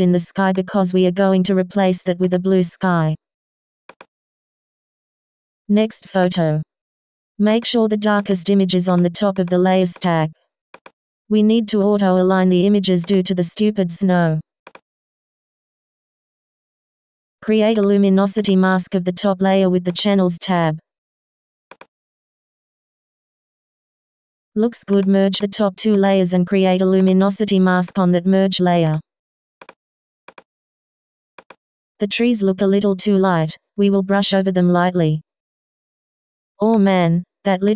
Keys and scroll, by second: 32.5 b.